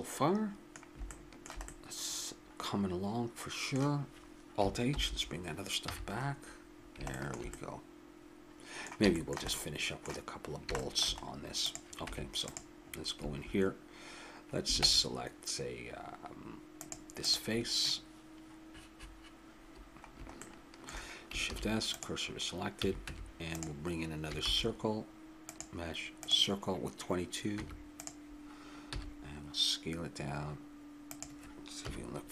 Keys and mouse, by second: 1.2-2.4 middle drag, 5.0 alt+h, 5.9 a, 11.6 click, 12.1 Tab, 14.8 ctrl+Tab, 17.2-19.0 drag, 20.4 middle click, 21.5 shift+s, 22.7 a, 23.1 Tab, 24.4 shift+a, 27.5 Tab, 28.9 s, 31.8 KP_3.